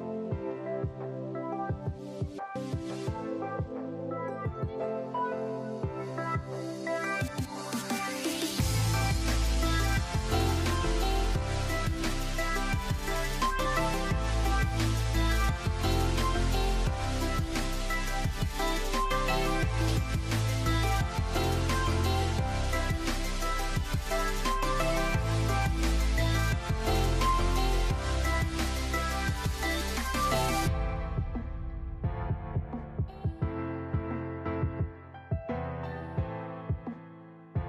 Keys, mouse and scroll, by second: 0.0 click, 0.2 scroll down 1, 0.4-4.6 middle drag, 2.5 shift+a, 3.0 s, 4.2 KP_Enter, 4.6 click, 4.9-9.4 middle drag, 6.0 scroll down 2, 6.1-6.7 scroll up 2, 7.8 ctrl+alt+KP_0, 8.8 n, 9.4 click, 11.2-19.1 middle drag, 14.4-17.2 scroll down 1, 17.2-17.7 scroll up 1, 17.7-18.2 scroll down 1, 18.3 KP_7, 19.1 click, 19.6 g, 20.3-21.3 middle drag, 21.3 click, 22.4 scroll down 1, 22.5-23.7 middle drag, 23.1 KP_0, 23.7 click, 25.5 click.